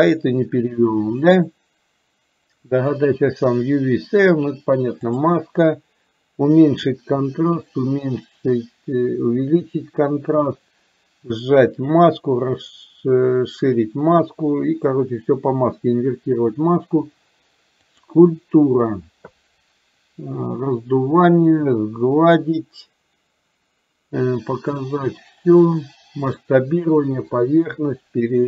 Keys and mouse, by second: 5.1-16.5 drag, 18.0-28.4 drag.